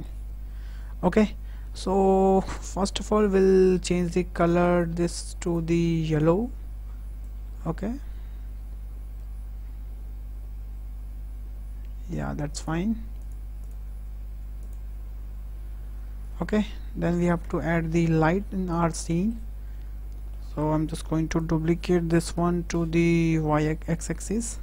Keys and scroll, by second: 17.3 KP_0, 21.8 shift+d, 22.2 y, 23.2 x.